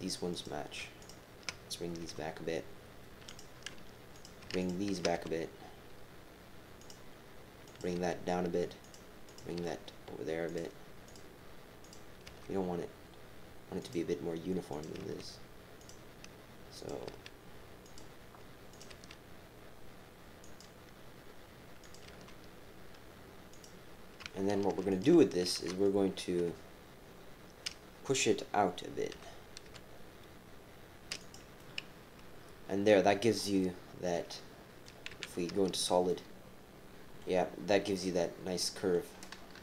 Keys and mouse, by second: 1.0 shift+click, 2.0 g, 4.1 click, 4.6 shift+click, 6.8 g, 7.6 click, 7.9 g, 9.3 click, 9.6 g, 11.0 click, 11.8 click, 12.2 g, 14.7 click, 14.9 g, 16.8 click, 17.1 g, 18.7 click, 18.9 g, 21.8 click, 22.1 g, 24.9 click, 26.4 KP_7, 29.1 g, 31.6-33.1 drag, 33.6-34.8 drag, 35.1 z, 36.1 click, 36.3 middle click, 38.0 click, 39.5 KP_3.